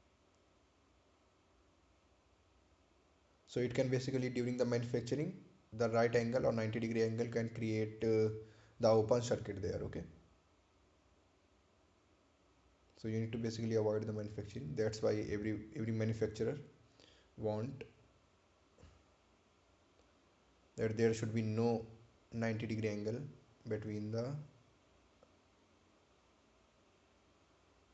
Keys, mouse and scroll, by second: 5.6 click, 9.7 click, 14.3 right click, 15.0 ctrl+click, 21.4 click, 26.6 right click, 27.2 ctrl+click.